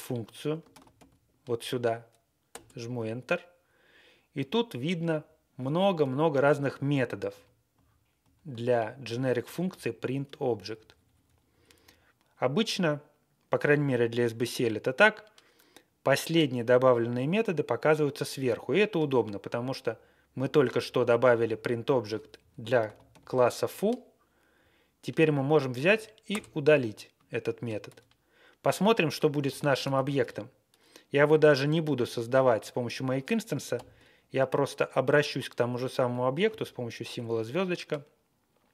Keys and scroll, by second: 0.6 ctrl+c, 1.1 b, 2.4 Return, 4.3-4.7 Page_Down, 5.0 Page_Down, 5.2 Down, 6.3 ctrl+v, 6.8 ctrl+v, 7.3 ctrl+v, 9.4 alt+shift+,, 10.2 Page_Down, 10.6 Page_Down, 10.8 Page_Down, 11.0 Page_Down, 11.2 Page_Down, 11.4 Down, 11.7 Down, 21.8 Right, 22.3 Left, 22.9 ctrl+c, 23.0 b, 24.5-24.9 Right, 25.3 Right, 25.6 Right, 25.8 Right, 26.2 Return, 27.8 q, 29.4 ctrl+g, 29.9 alt+shift+., 33.7 shift+8.